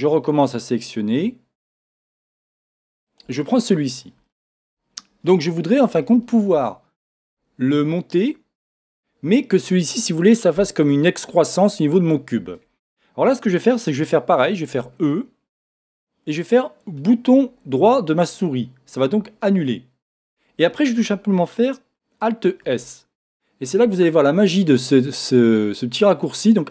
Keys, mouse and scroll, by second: 0.3 click, 1.6 shift+click, 1.9-3.1 middle drag, 3.1 shift+click, 3.4-17.0 middle drag, 4.8-5.2 scroll up 1, 6.4-10.5 shift+scroll up 1, 17.0 right click, 22.7 alt+s.